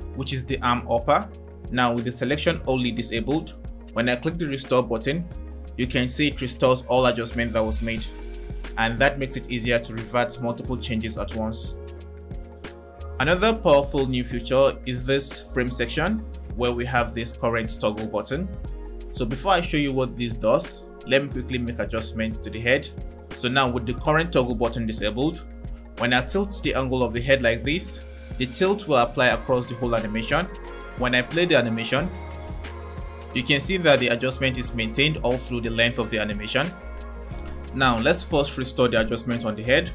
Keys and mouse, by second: 2.2 click, 4.8 click, 12.7 click, 21.4-22.7 drag, 29.7 click, 31.9 click, 32.4 space, 37.5 space, 39.6 click.